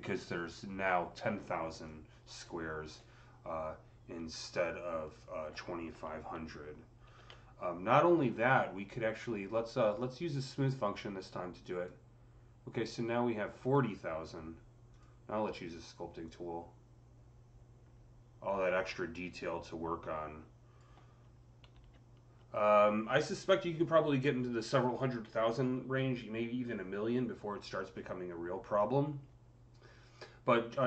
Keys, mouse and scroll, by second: 0.3-0.8 scroll down 3, 1.0-1.5 scroll down 5, 1.7-11.5 alt+drag, 6.9 ctrl+z, 13.5 click, 15.6 click, 16.4-24.7 drag, 21.6 ctrl+z, 28.1 click, 28.1-29.1 scroll down 3, 28.2 ctrl+z, 28.7-29.1 scroll up 1.